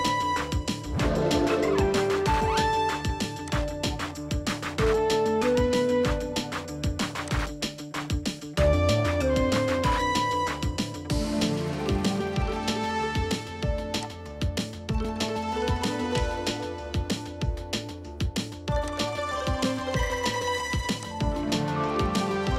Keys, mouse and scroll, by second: 0.1 double click, 0.9 typing, 6.0 typing, 9.1 scroll up 1, 9.6 middle click, 9.7-10.3 scroll up 1, 10.6-10.9 scroll down 1, 10.9 middle click, 17.6 middle click, 17.8 typing, 20.4 typing, 21.7-22.0 scroll up 1, 22.0 middle click.